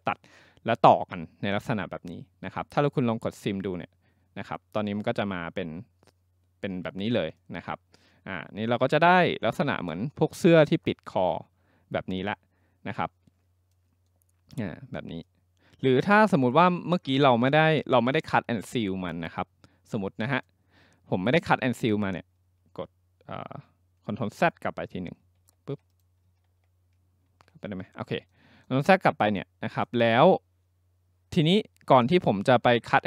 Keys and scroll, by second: 24.3 ctrl+z, 25.3 ctrl+z, 26.5 ctrl+z, 27.3 ctrl+z.